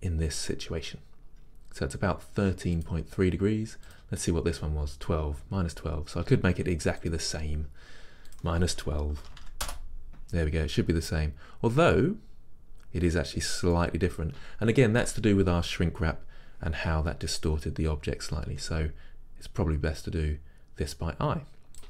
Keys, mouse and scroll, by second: 9.7-21.8 drag, 9.8 Return, 18.6 r.